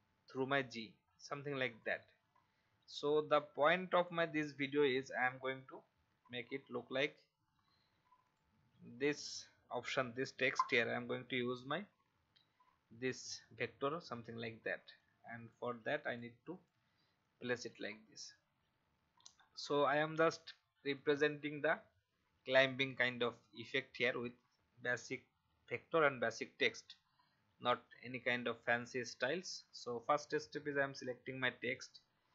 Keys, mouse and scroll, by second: 1.0-1.5 alt+scroll down 1, 1.8-4.5 drag, 7.4-8.2 scroll up 1, 8.2 click, 8.9-10.5 alt+scroll down 1, 10.5-18.7 drag, 23.9 alt+scroll up 1, 29.7-30.8 drag, 31.6 right click.